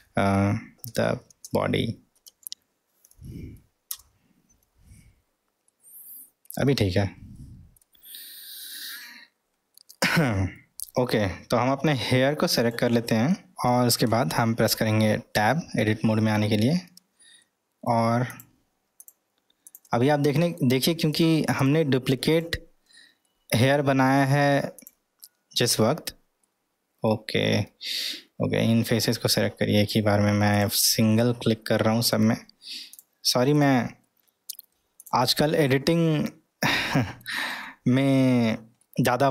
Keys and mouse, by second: 5.7 middle click, 7.4-7.8 middle drag, 8.2-8.7 middle drag, 9.7-10.2 middle drag, 10.6 middle drag, 13.3 middle click, 14.1-14.7 middle drag, 15.4 Tab, 17.5-17.9 middle drag, 18.3 click, 19.0 click, 19.6 click, 20.2 middle click, 21.1 click, 21.6 drag, 22.3 click, 23.3-23.6 middle drag, 24.2 drag, 24.7 click, 26.4-27.0 middle drag, 28.9-30.0 drag, 30.5 click, 31.2-32.1 middle drag, 32.9 click, 34.1 middle click, 35.9-37.2 middle drag, 37.8-38.4 middle drag, 38.8-39.3 middle drag.